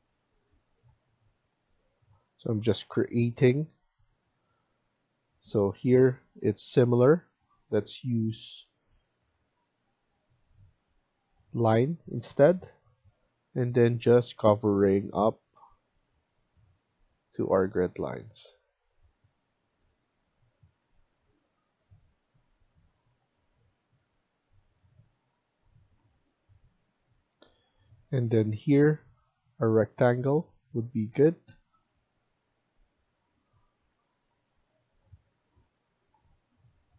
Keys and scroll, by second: 22.4 Escape, 33.7 Escape.